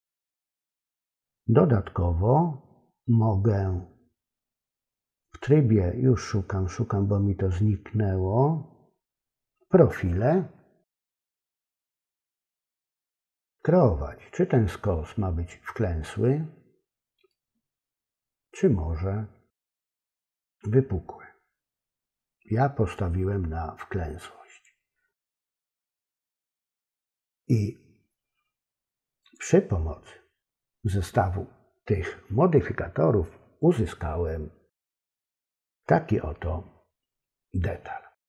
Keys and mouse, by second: 17.4-19.8 drag, 23.1-24.7 drag, 29.3 click.